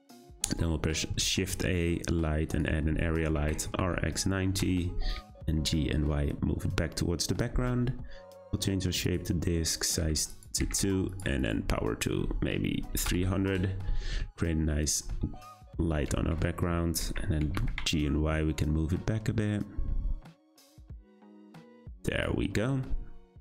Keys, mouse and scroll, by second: 1.0 scroll down 1, 1.3 shift+a, 3.3 r, 5.1 g, 8.3-9.8 drag, 10.0 2, 10.3 click, 11.3-13.2 drag, 13.2 0, 14.2 `, 15.6 scroll up 2, 15.9 g, 17.4 g, 22.1 click.